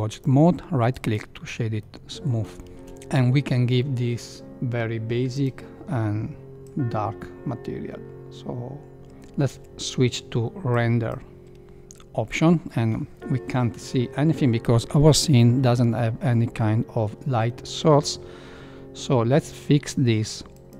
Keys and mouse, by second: 0.1 right click, 1.9 middle click, 2.6 shift+middle click, 9.4 z, 20.5 drag.